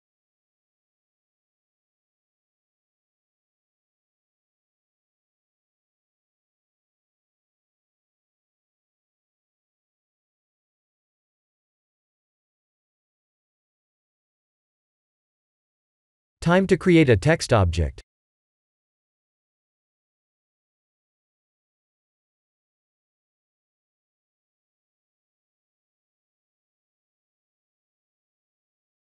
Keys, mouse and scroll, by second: 0.1 click, 2.1 middle click, 7.5 middle click, 8.6 scroll up 2, 8.8-9.2 scroll down 4, 9.9 middle click, 16.5 click, 17.1 middle click, 18.2 shift+a, 23.8 middle click, 25.7 Tab, 26.1 BackSpace, 26.5 BackSpace, 26.6 BackSpace.